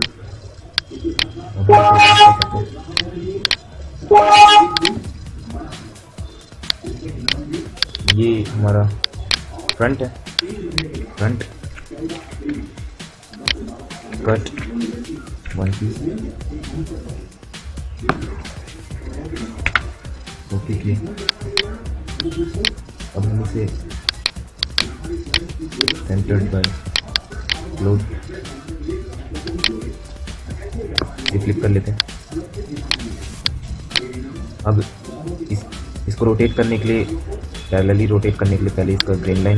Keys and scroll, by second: 1.4 Delete, 3.9 Delete.